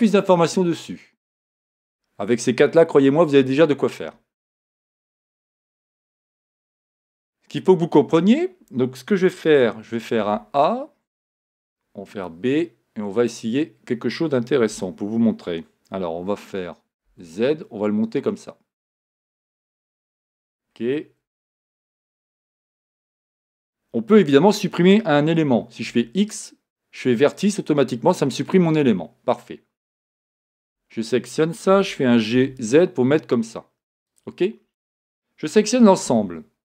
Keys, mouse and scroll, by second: 3.5 Escape, 5.9-6.3 scroll down 2, 6.3-6.7 scroll up 2, 6.7-9.6 scroll down 2, 9.6-10.2 scroll down 1, 10.2 a, 20.2 click, 21.4-23.3 shift+middle drag, 23.3 click, 25.9 x, 34.1 click, 35.6 a.